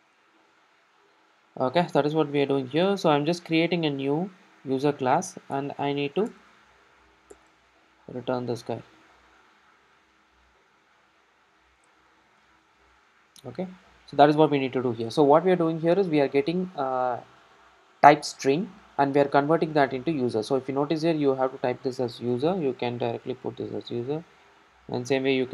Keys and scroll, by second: 5.6 alt+Return, 10.0 ctrl+alt+Down, 11.3 ctrl+alt+Down, 11.3 ctrl+alt+shift+Right.